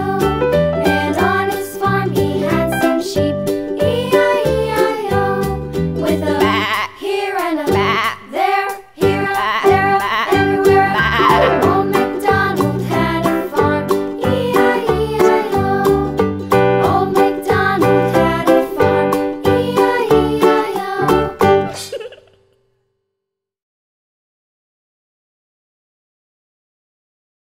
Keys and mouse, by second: 23.0 right click, 23.1 right click, 23.4 click.